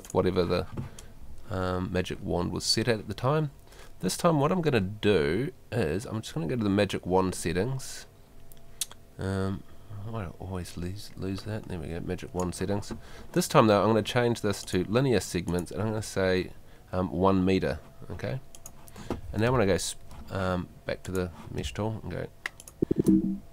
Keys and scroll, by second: 19.5 space, 21.6 space.